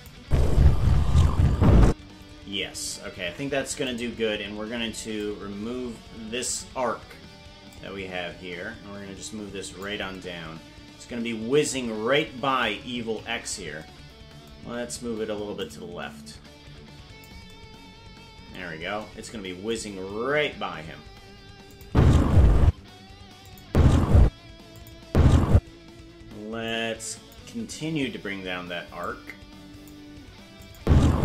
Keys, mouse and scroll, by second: 0.0-0.2 typing, 1.9 space, 3.2 ctrl+Tab, 3.9 right click, 5.2-6.5 drag, 7.6-9.8 drag, 13.1 KP_Decimal, 15.5-17.2 drag, 20.1 KP_0, 21.7-23.0 drag, 21.8 space, 22.6 space, 23.5 click, 23.6 space, 24.8 click, 25.0 space, 25.5 space, 26.7 click, 28.9 click, 30.6-31.2 drag, 30.8 space.